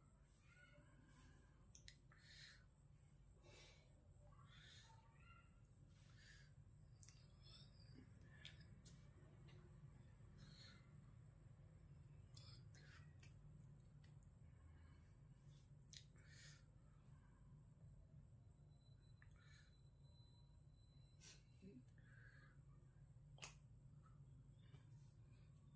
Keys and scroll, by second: 17.3 ctrl+w.